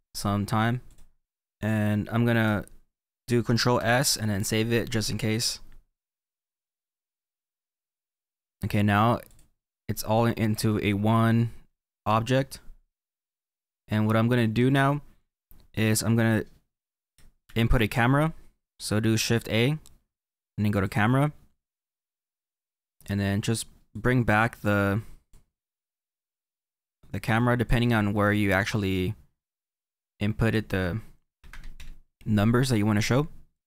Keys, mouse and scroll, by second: 7.8-8.5 scroll down 2, 8.5-9.4 scroll up 1, 9.4 click, 23.1 click, 23.9 click, 26.0 click, 28.0-28.6 scroll down 3, 28.6-31.8 middle drag, 31.8 click, 33.5 click.